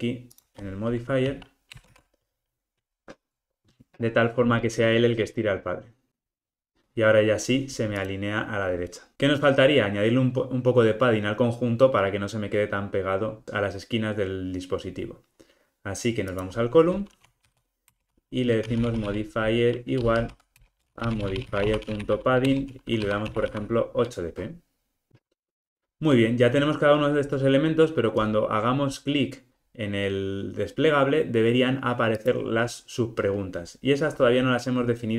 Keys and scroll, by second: 1.9 super+v, 20.6 Return.